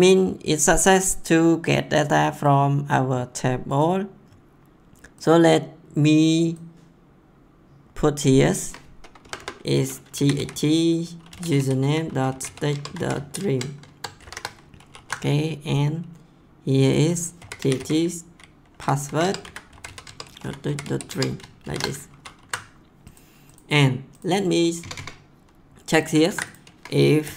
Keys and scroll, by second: 9.2-14.2 typing, 13.9 Caps_Lock, 14.7 ctrl+s, 17.1-22.2 typing, 19.0 Up, 24.8 Return, 26.3 ctrl+c, 27.0-27.3 typing.